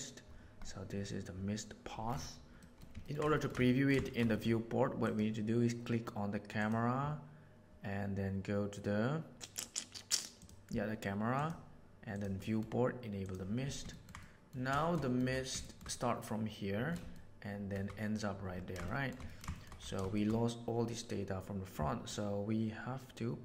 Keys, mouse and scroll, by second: 2.5 middle drag, 3.3 shift+middle click, 3.6 ctrl+middle click, 4.0 shift+middle click, 4.2 middle click, 5.0 click, 10.4 click, 11.3 click, 12.0 click, 12.5 middle click, 13.2 click, 13.8 ctrl+middle click, 14.1-14.4 middle drag, 14.7 shift+middle drag, 15.0 middle click, 15.6 shift+middle click, 17.0-17.6 shift+middle drag, 18.8 shift+middle drag, 19.2 ctrl+middle drag, 19.4 shift+middle drag, 20.1 shift+middle click.